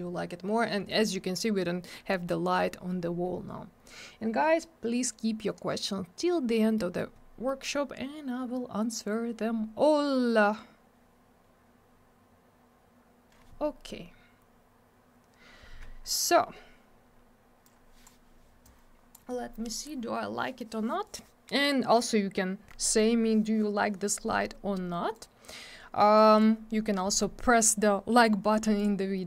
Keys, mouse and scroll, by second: 6.8 middle click, 7.1 scroll down 1, 7.4 middle click, 7.6 middle click, 12.9-14.1 scroll up 1, 15.3-16.6 scroll down 1, 17.6 click, 18.6 click, 25.1 click, 26.1 click, 28.8 click, 28.8 click.